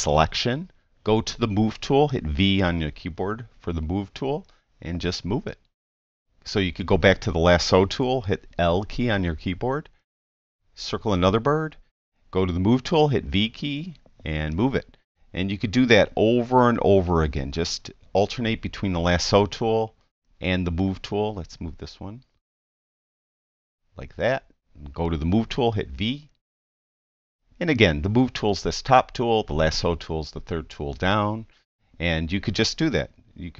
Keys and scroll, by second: 2.4 v, 8.7 i, 13.3 v, 17.7 i, 25.6 v, 33.2 i.